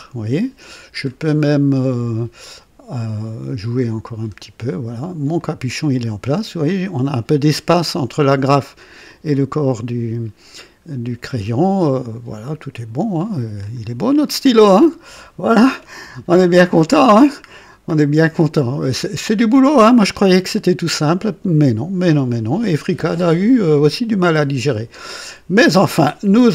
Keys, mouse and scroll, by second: 0.9-1.6 scroll up 2, 3.1-4.0 scroll up 2, 4.6 click, 5.3-7.2 drag, 9.0-13.8 drag, 14.6 click, 16.3 click, 17.4-17.8 scroll down 1, 18.3-19.0 right drag, 19.6 right click, 20.5 scroll down 1.